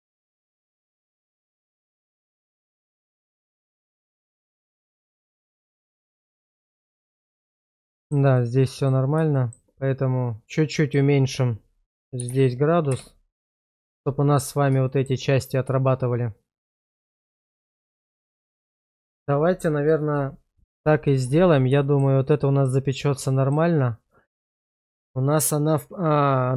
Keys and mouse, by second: 0.0-1.2 middle drag, 1.5 shift+middle click, 2.2-3.0 middle drag, 3.2 shift+middle drag, 3.7-5.1 middle drag, 5.6 shift+middle drag, 5.9-7.7 middle drag, 7.9 shift+middle click, 8.3 middle click, 9.3 shift+middle click, 10.9-13.1 drag, 14.9 shift+middle drag, 17.1-18.3 middle drag, 18.8 shift+middle click, 21.8 shift+middle drag, 22.2-22.6 middle drag, 23.3 shift+middle drag, 23.8-24.5 middle drag.